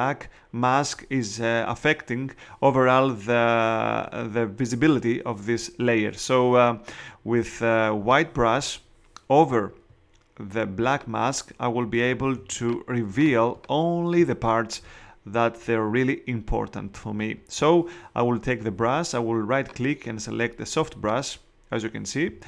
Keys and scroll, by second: 12.3 space.